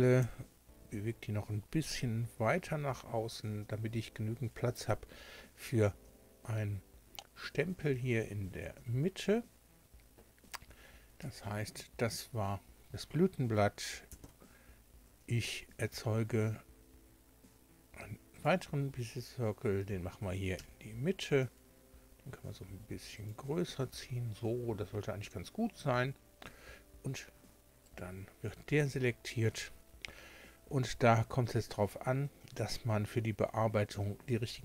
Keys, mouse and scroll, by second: 0.2 g, 1.9 y, 4.8 click, 11.2 Tab, 14.1 shift+a, 18.4 click, 20.6 Tab, 21.4 s, 23.2 click, 23.7 Tab, 26.4 Tab, 27.3 Tab, 27.8 right click.